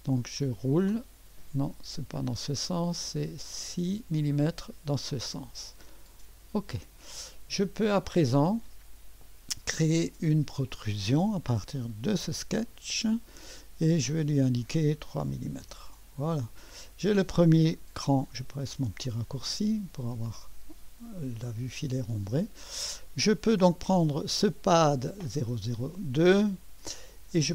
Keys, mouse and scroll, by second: 0.5-1.0 scroll down 2, 1.0-2.4 scroll up 2, 2.4-4.6 scroll up 1, 6.3 click, 8.1-11.0 drag, 12.2 click, 14.1-15.3 drag, 15.2-15.9 typing, 18.8 Return, 20.4-22.3 drag, 22.4-22.8 scroll up 1, 22.8 drag, 24.4-25.6 drag.